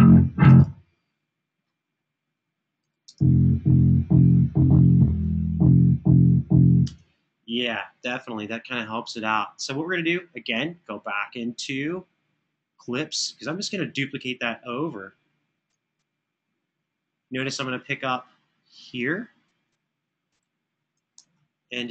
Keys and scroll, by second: 0.3 space, 2.8 space, 6.6 space, 20.9 super+[, 21.1 super+[.